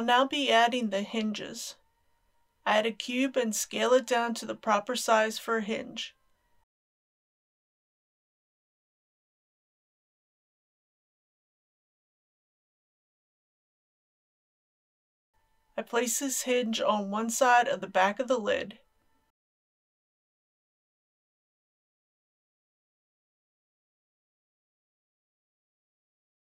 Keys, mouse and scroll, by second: 0.4-2.2 middle drag, 2.2 KP_3, 3.6 shift+a, 5.4 click, 6.7 s, 7.5 click, 7.7 g, 8.9 click, 9.8 KP_1, 11.2 scroll up 1, 11.9 shift+middle click, 12.6 shift+s, 13.9 click, 14.1 g, 14.2 z, 16.5 shift+click, 18.1 g, 20.2 click, 20.4 typing, 21.2 click, 21.3 scroll up 2, 21.4 middle click, 21.6 scroll down 1, 21.7 scroll up 1, 21.9-23.4 typing, 22.5 click, 23.2 click, 25.1 KP_3, 25.5 g.